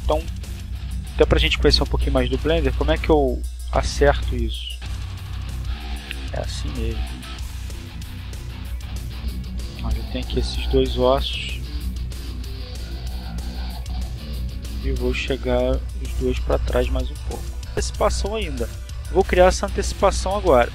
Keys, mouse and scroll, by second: 0.0 middle click, 0.3 click, 2.2-3.7 drag, 4.4-5.4 scroll up 2, 6.4 right click, 8.7 scroll up 2, 9.6 right click, 11.1 a, 11.7 shift+right click, 12.2 shift+right click, 13.5 g, 15.0 click, 16.2-17.4 drag, 19.8 click.